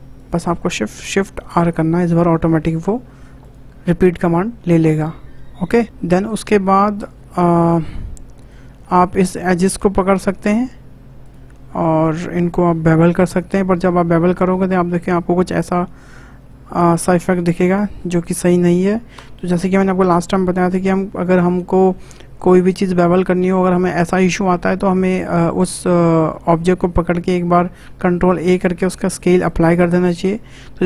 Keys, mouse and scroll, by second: 0.2 shift+click, 1.3 shift+r, 2.1 scroll down 1, 2.3 middle click, 3.0-3.4 scroll down 3, 3.4 click, 3.7-4.0 scroll down 2, 4.0-5.8 middle drag, 6.0-6.4 scroll up 4, 6.8 shift+middle click, 7.2-7.6 scroll up 1, 7.6-8.8 shift+middle drag, 8.8 click, 9.9 2, 10.2 click, 11.2 shift+click, 12.8 ctrl+b, 17.8 ctrl+z, 19.1 Tab, 28.3 ctrl+a.